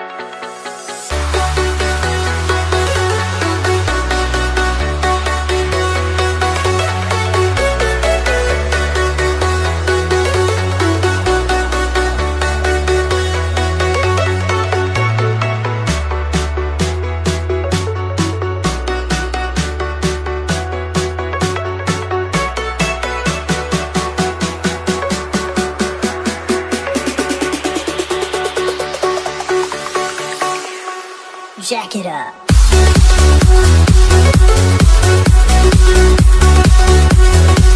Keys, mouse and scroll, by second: 6.7 click, 17.1 t, 18.2 click, 23.5 s, 24.4 click.